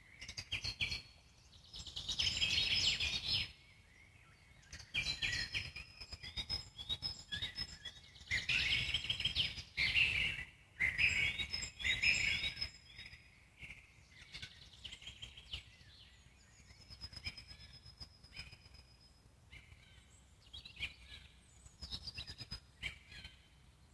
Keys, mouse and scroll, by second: 1.9 middle click, 2.4 click, 3.3 z, 4.1 z, 6.5-8.0 alt+middle drag, 8.0 click, 8.2 z, 8.5 click, 8.9 z, 11.3 click, 11.6 z, 12.1 z, 12.8 g, 13.6-15.1 alt+middle drag, 15.1 scroll up 1, 15.4-16.4 alt+middle drag, 16.4 click, 19.9 click, 20.5-22.0 alt+middle drag, 22.0-22.5 scroll down 2, 22.5-23.4 alt+middle drag, 23.4 scroll up 3, 23.6 click.